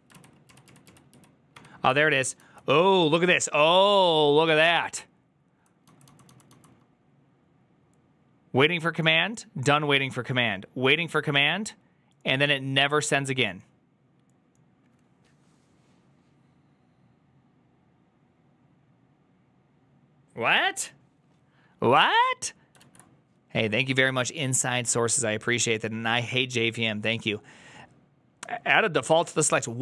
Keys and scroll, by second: 0.0 ctrl+u, 0.4 ctrl+u, 0.7 ctrl+u, 1.2 ctrl+u, 2.3 ctrl+d, 2.3 typing, 3.9-5.2 typing, 22.7 alt++, 22.7 alt+[.